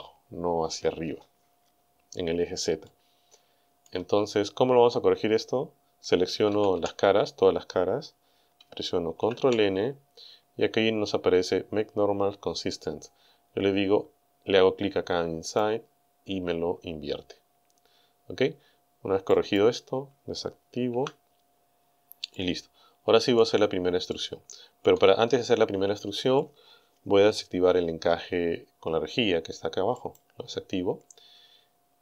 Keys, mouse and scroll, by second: 2.9-4.0 drag, 6.5 a, 9.2 ctrl+n, 15.5 click, 19.4 click, 20.9 n, 22.3-23.6 middle drag, 24.1 shift+middle click, 30.0 click, 31.6 scroll up 2.